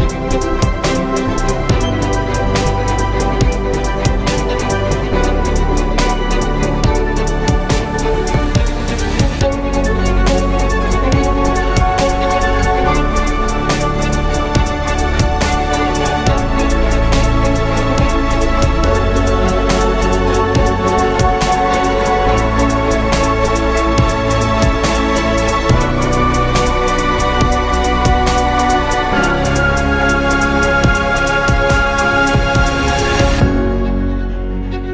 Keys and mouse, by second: 0.5 t, 7.1 z, 12.0 z, 12.8 x, 18.8 ctrl+z, 20.5 z, 21.7 KP_3, 23.3 z, 28.1 z, 30.1 z, 31.1 ctrl+z, 31.4 ctrl+z, 32.7-33.9 drag.